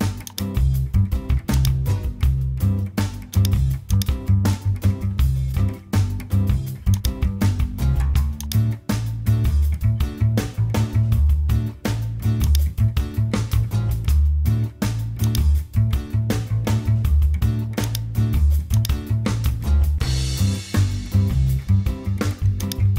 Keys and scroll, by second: 10.5 Return.